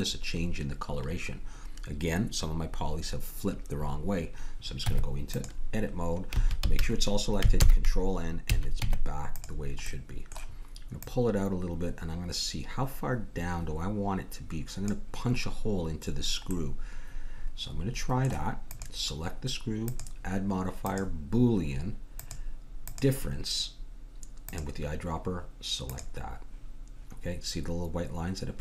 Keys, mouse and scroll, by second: 4.8 Tab, 6.3 a, 6.6 a, 7.6 ctrl+n, 8.5 a, 8.8 Tab, 11.0-12.9 drag, 16.5-18.3 middle drag, 18.7-21.6 drag, 22.2-23.9 drag, 24.5-26.2 drag, 26.2 click.